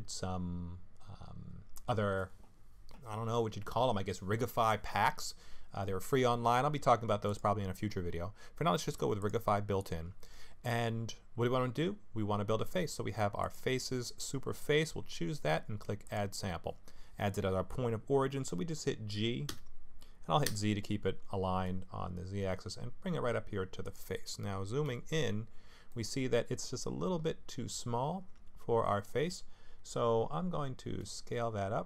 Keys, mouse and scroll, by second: 7.3 click, 13.4 click, 16.0 click, 19.5 g, 24.8 KP_Decimal, 25.6-26.2 scroll down 2, 25.9 middle click, 31.0 s.